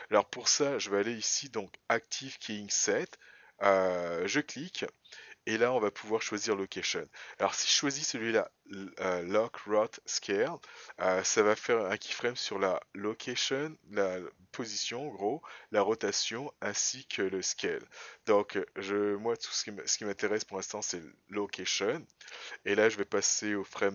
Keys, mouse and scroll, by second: 23.7 click.